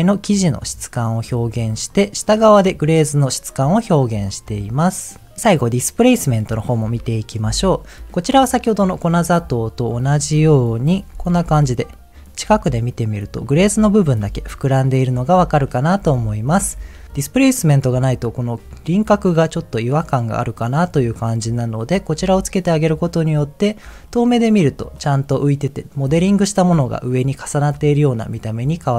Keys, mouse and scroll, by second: 1.9 ctrl+shift+click, 3.3 middle click, 6.1 click, 7.4 m, 8.9 middle click, 9.2-9.9 scroll up 3, 10.7 click, 11.4 m, 14.2 m, 15.3 m, 15.9 m, 16.5 m, 17.1 scroll up 1, 21.8 click, 22.1 m, 23.4-24.1 scroll down 3, 24.1-24.4 middle drag, 24.7 scroll down 1, 27.3-28.9 middle drag.